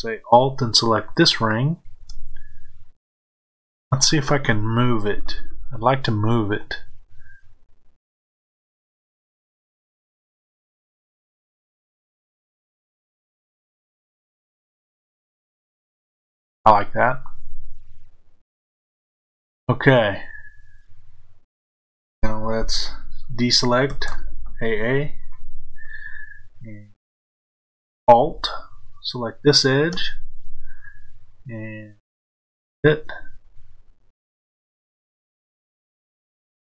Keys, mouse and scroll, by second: 1.0 alt+click, 6.6-29.1 drag, 23.8 a, 35.0-36.6 drag.